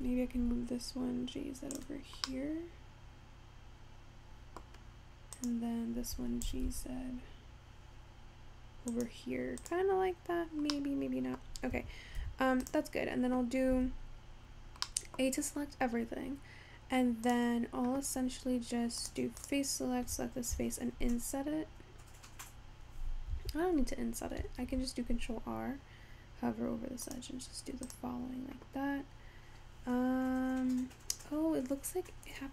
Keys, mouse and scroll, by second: 0.0 g, 2.3-5.4 middle drag, 5.4 click, 6.5 g, 9.7 click, 10.2 scroll down 3, 10.8 scroll up 1, 10.8-11.8 middle drag, 11.8 Tab, 12.4 Tab, 12.7 click, 14.0 a, 15.1 middle click, 15.4 scroll up 2, 17.3 click, 19.1 click, 19.5 click, 24.7 ctrl+r, 29.5-30.4 scroll up 4, 30.4 scroll down 2, 31.2-31.8 scroll up 2, 31.8 scroll down 1, 32.2-32.5 scroll up 4.